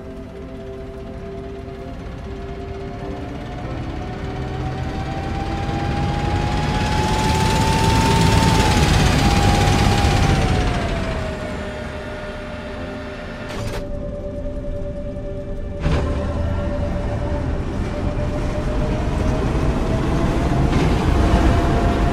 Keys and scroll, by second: 0.2 d, 1.5 d, 3.2 a, 9.5 a, 10.0 s, 15.0 q, 15.6 w, 18.9 d.